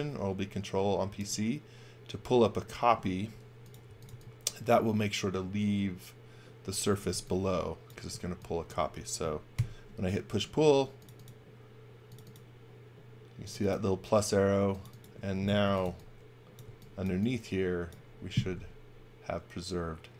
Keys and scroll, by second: 3.6-4.6 typing, 6.6-8.1 typing, 9.5 b, 15.4-17.0 typing, 18.5 b.